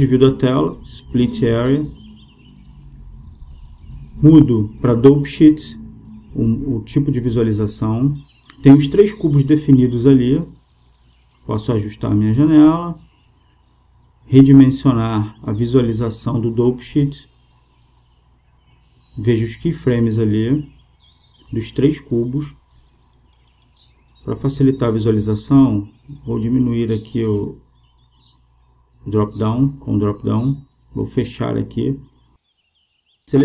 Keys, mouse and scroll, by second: 3.1-4.9 drag, 5.3-7.1 drag, 11.8-13.5 drag, 20.0-21.8 drag, 26.2-29.2 drag, 30.4-32.1 drag, 32.2-33.4 drag.